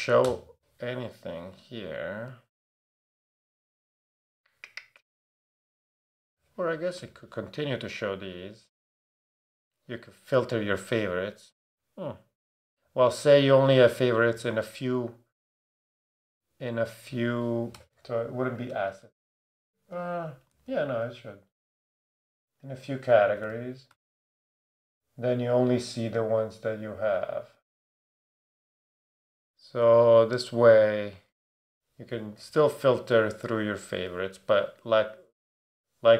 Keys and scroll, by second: 0.2 BackSpace, 17.7 BackSpace, 19.0 Right, 23.0-24.7 typing, 27.0 BackSpace, 29.8 super+a.